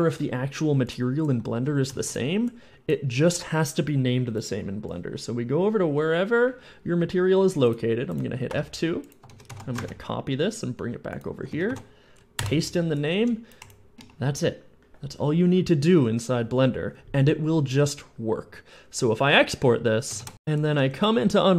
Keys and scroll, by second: 1.2 w, 1.5 a, 1.7 s, 1.8 d, 8.3 F2, 8.6 F2, 9.1 ctrl+a, 9.3 ctrl+a, 9.3 ctrl+c, 9.7 alt+Tab, 11.4 ctrl+a, 11.5 ctrl+a, 11.5 ctrl+v, 11.9 ctrl+v, 12.2 Return, 12.6 Return, 13.0 d, 13.4 d, 20.0 ctrl+shift+e, 20.5 d.